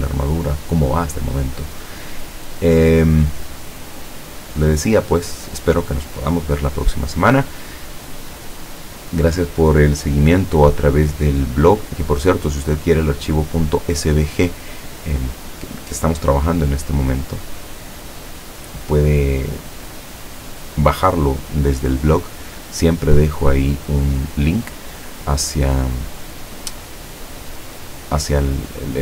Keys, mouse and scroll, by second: 18.3 click.